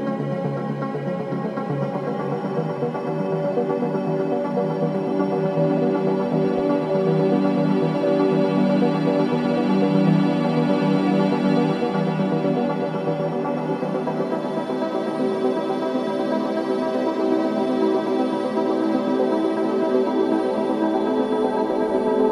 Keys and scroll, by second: 2.9 ], 8.5 Escape, 10.8 ,.